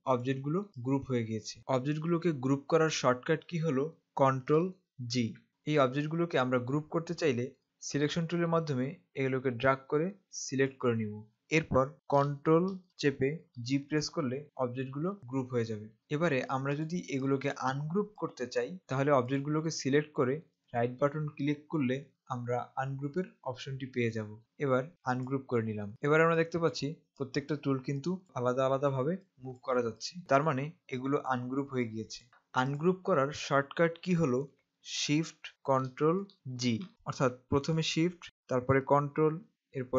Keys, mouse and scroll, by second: 4.9 ctrl+g, 8.1 click, 13.8 ctrl+g, 16.9 click, 18.8 click, 20.5 right click, 25.3 click, 26.0 click, 36.4 ctrl+shift+g.